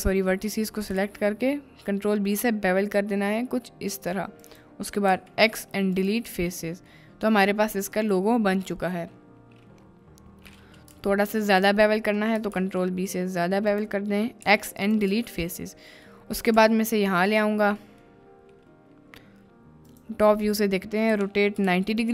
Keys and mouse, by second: 0.0-0.4 drag, 1.0 ctrl+b, 5.1 x, 6.3 Tab, 6.8 middle click, 7.6 click, 11.0 ctrl+z, 11.3 ctrl+z, 11.5 ctrl+z, 12.5 ctrl+b, 13.7 click, 14.4 x, 15.1 Tab, 16.1-16.4 middle drag, 16.6 x, 16.6 g, 17.3 click, 17.9 middle click, 19.9 click, 21.1 r, 21.5 9, 21.7 0, 22.0 click.